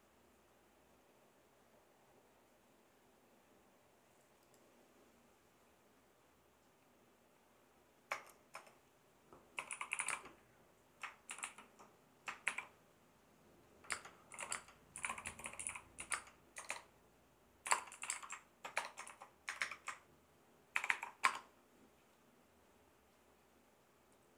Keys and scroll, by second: 8.1 Return, 9.4-11.3 typing, 12.5 shift+r, 13.9-19.1 typing, 19.5 Return, 20.7 shift+4, 21.2 space.